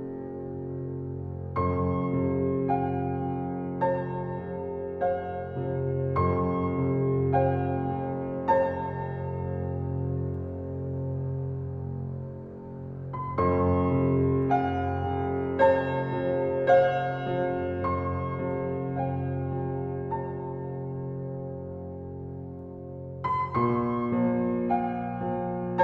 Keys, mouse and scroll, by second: 0.5-1.3 scroll up 3, 1.7 click, 2.5 Tab, 3.8 click, 4.3 shift+click, 4.9-5.3 scroll up 1, 5.3 shift+click, 5.5 shift+click, 5.9 shift+click, 6.1 shift+click, 7.7-8.3 drag, 9.6 click, 11.4 click, 11.9-12.2 scroll down 1, 12.2-13.4 drag, 16.3 Tab, 17.1-17.4 scroll down 2, 17.4 click, 18.2-18.8 drag, 19.7-21.5 drag, 23.1-23.9 middle drag, 23.9 scroll up 4, 24.2-25.8 middle drag.